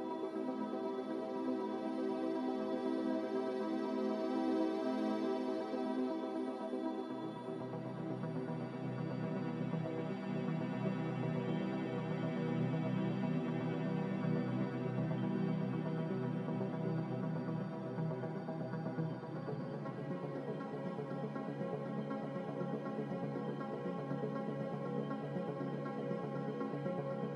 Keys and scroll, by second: 13.2 ctrl+z, 20.0 2.